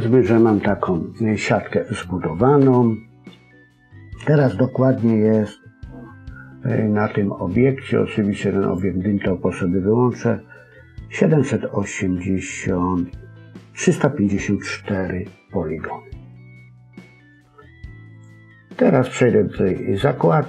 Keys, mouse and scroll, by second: 0.1-0.5 scroll down 2, 0.5 middle click, 1.9-2.5 scroll up 1, 2.5 KP_1, 8.6 click, 18.1 click.